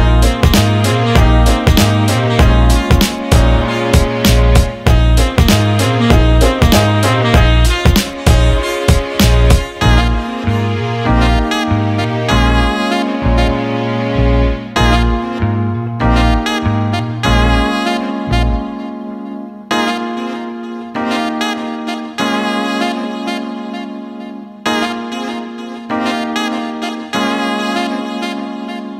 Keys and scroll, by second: 2.7 ctrl+z, 25.5 Caps_Lock.